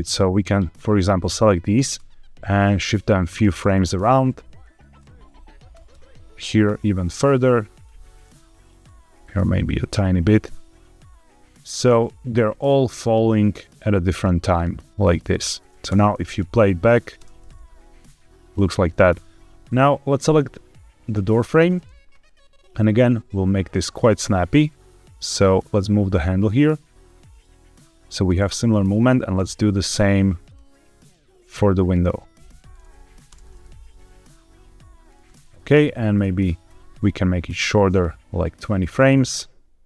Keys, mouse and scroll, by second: 1.6 g, 1.8 x, 3.2 click, 3.9 click, 4.5 click, 5.6 g, 5.8 x, 6.8 click, 7.6 click, 8.4 click, 9.0 g, 9.2 x, 9.8 click, 12.0-15.6 drag, 15.8 space, 17.1 space, 17.9 click, 19.8 click, 21.0 click, 22.6 click, 23.2 click, 28.8 click, 30.3 click, 31.0 click, 32.8 drag, 33.2 space, 35.1 space, 35.8 drag, 36.3 g, 36.6 x, 38.7 click.